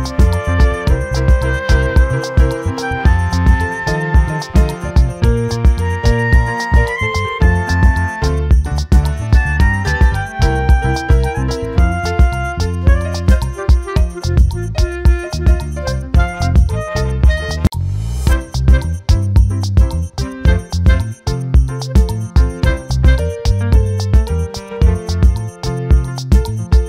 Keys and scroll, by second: 5.1 ctrl+t, 23.9 ctrl+t.